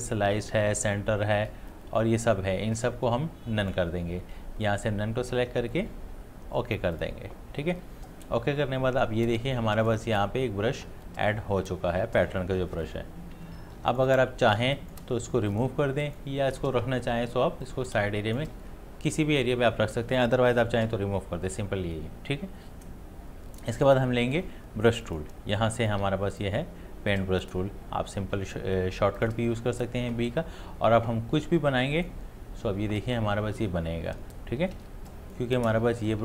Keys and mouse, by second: 1.7-3.7 drag, 7.0 click, 13.6 space, 13.9 ctrl+alt+click, 14.6 space, 15.8-21.1 drag, 25.0-29.2 drag, 31.6-34.8 drag, 34.8 ctrl+z, 35.1 click.